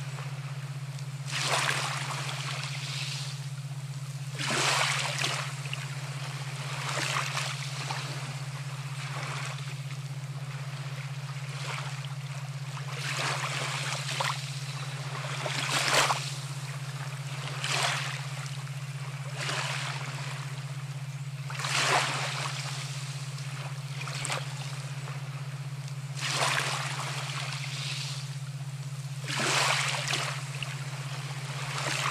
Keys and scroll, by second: 11.4 ctrl+alt+shift+e.